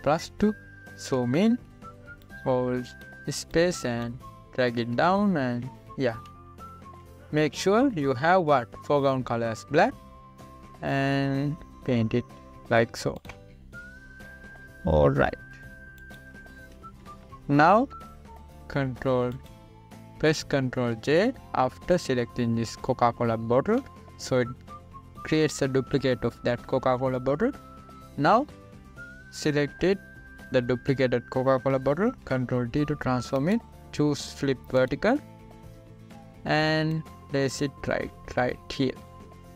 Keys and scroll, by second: 0.8 ctrl+=, 2.8 space, 7.6 ], 8.9 [, 17.8 ctrl+=, 25.0 ctrl+j, 33.7 ctrl+t.